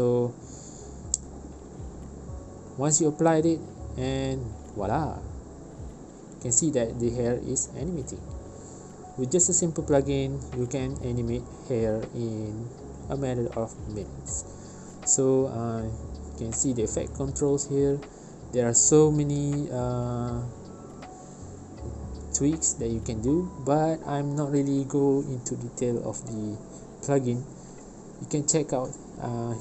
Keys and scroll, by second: 0.7 space, 2.4 space, 6.7 space, 14.5 space.